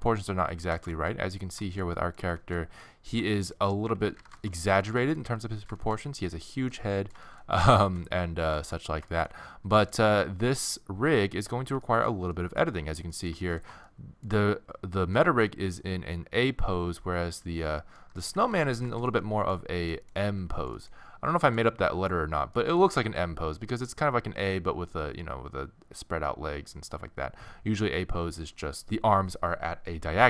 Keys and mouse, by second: 0.3 click, 4.0 z, 6.6 z, 10.6 middle click, 11.9-15.4 middle drag, 18.0 middle click, 18.3 z, 19.2 middle click, 20.3 z, 23.5-26.2 middle drag.